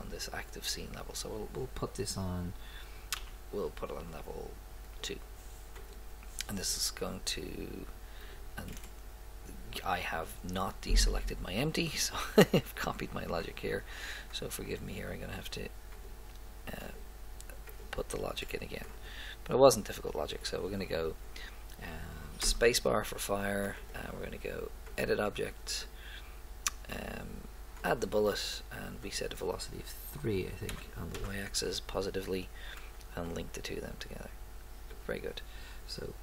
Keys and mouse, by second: 3.2 m, 5.8-7.0 drag, 12.8 click, 21.2-22.5 drag, 33.2-35.0 drag.